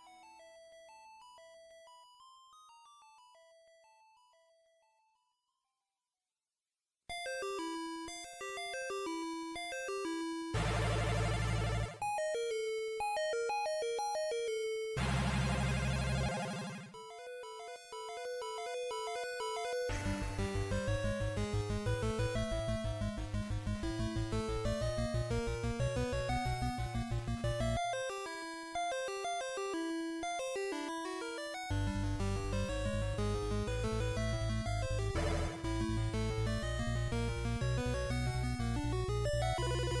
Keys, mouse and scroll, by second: 3.7 click, 6.5 middle click, 7.5-8.6 scroll down 6, 10.3 shift+middle click, 10.3-10.7 scroll down 1, 11.6 shift+a, 18.0 scroll down 1, 18.8 scroll down 2, 18.8 KP_7, 20.1 scroll down 4, 20.1 shift+c, 21.6 shift+middle click, 23.4 shift+a, 26.0 Escape, 26.7 shift+s, 30.3 KP_1, 31.6 scroll up 2, 32.8 scroll up 2, 33.8 click, 36.8-37.6 scroll up 4, 39.9 click, 39.9-40.0 scroll up 4.